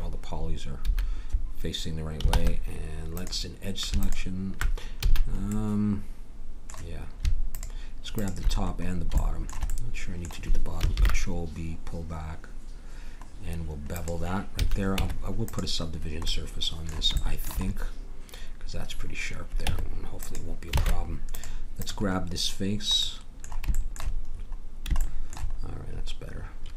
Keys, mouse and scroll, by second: 0.8 a, 2.3 ctrl+Tab, 4.9 a, 11.0 ctrl+b, 14.9 a, 15.0 Tab, 19.6 Tab, 20.7 ctrl+Tab, 24.5 middle click.